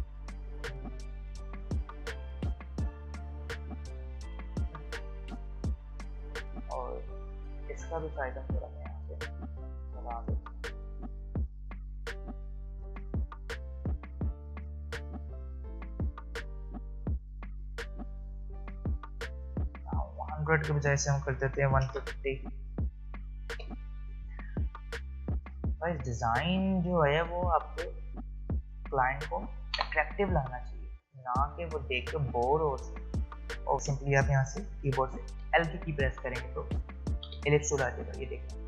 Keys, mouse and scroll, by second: 23.5 Return, 25.4 shift+click, 31.1 alt+scroll down 1, 32.7-33.3 alt+scroll up 1, 33.6 click, 33.7 right click, 35.4 l, 37.3 v.